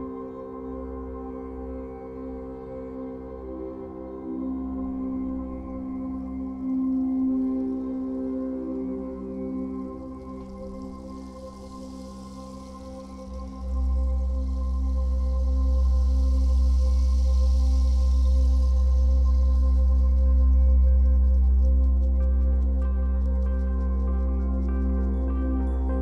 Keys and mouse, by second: 0.0 click, 0.7-2.0 ctrl+alt+drag, 2.7-3.8 alt+drag, 4.4 g, 4.7 y, 5.3 click, 7.0 click, 9.5 alt+click, 11.9 click, 12.6 2, 13.0 Return, 13.8 click, 15.1 4, 15.5 Return, 17.2 click, 17.9 click, 20.7-23.0 ctrl+alt+drag, 23.0 typing, 23.2-26.0 alt+shift+drag.